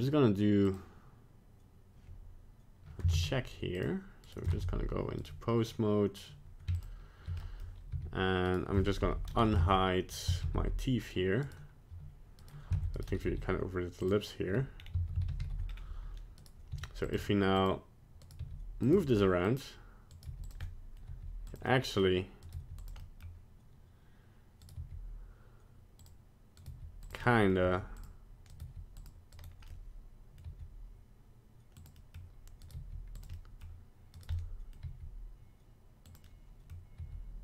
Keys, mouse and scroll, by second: 0.7 click, 3.1 ctrl+Tab, 4.2 right click, 4.6 ctrl+Tab, 5.2 right click, 6.8 shift+click, 7.4 middle click, 7.9 g, 9.0 alt+h, 9.6 ctrl+Tab, 10.4 alt+h, 11.4 right click, 12.4 right click, 12.8 ctrl+Tab, 13.0 right click, 13.3 g, 14.8 scroll down 2, 15.0 a, 15.3 alt+r, 15.4 alt+g, 15.7-16.4 scroll up 2, 16.4 right click, 16.7 r, 17.2 g, 18.2 right click, 18.4 r, 18.9 g, 20.1 right click, 20.3 g, 20.6 middle click, 21.1 g, 21.6 middle click, 22.4 right click, 22.5 g, 23.0 middle click, 24.6 right click, 24.8 g, 26.6 right click, 26.7 g, 27.2 middle click, 27.6 g, 28.5 right click, 28.6 g, 29.3 right click, 29.7 middle click, 30.5 g, 31.9 middle click, 32.6 right click, 32.7 g, 33.3 middle click, 34.2 right click, 34.3 middle click, 34.8 g, 36.3 middle click, 36.6 middle click, 37.0 g.